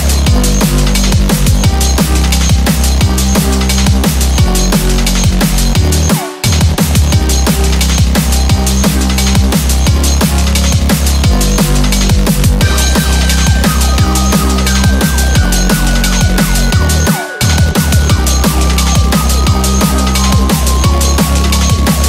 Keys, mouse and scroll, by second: 0.6 scroll up 1, 0.7 Tab, 1.0 scroll down 2, 1.3 middle click, 1.5 right click, 3.2 scroll down 2, 5.5 ctrl+2, 6.1 middle click, 6.5-6.8 scroll up 5, 6.8 middle click, 8.7 click, 9.4 click, 10.1 click, 10.9 middle click, 13.4 scroll up 4, 13.7-14.8 scroll down 8, 13.9 middle click, 14.6 middle click, 15.4 scroll down 2, 15.6 middle click, 16.0 h, 16.2 scroll up 4, 16.4 middle click, 17.5 click.